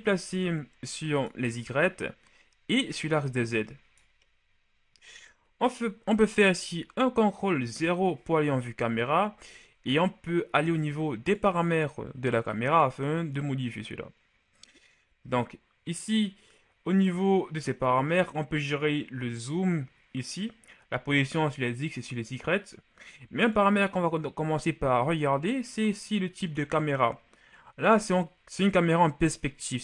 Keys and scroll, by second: 7.5 ctrl+KP_0.